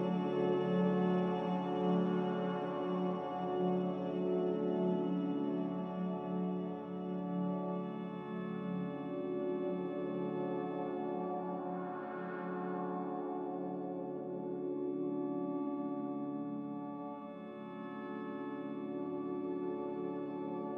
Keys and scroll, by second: 10.2 q.